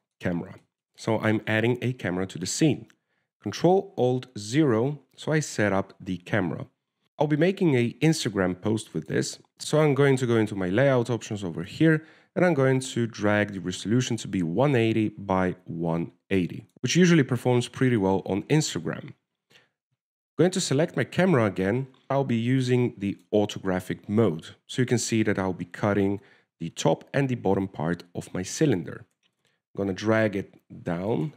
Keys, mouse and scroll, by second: 1.9 middle click, 5.4 ctrl+alt+KP_0, 9.6 click, 13.0 click, 16.7-17.9 scroll down 1, 18.1 w, 21.8 click, 23.8 click, 25.3-26.8 scroll down 1, 26.8 scroll down 1, 30.4 g.